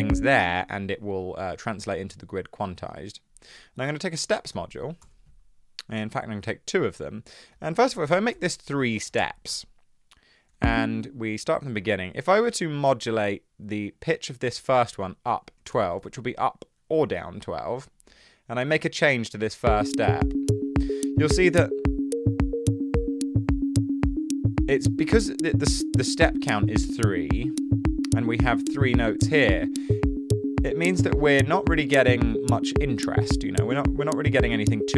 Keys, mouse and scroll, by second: 0.0 super+z, 0.3 space, 1.3 space, 4.1-5.0 typing, 6.2 typing, 8.0 2, 8.3 Return, 9.1 3, 9.3 Return, 10.8 space, 15.3-16.2 typing, 19.6 space.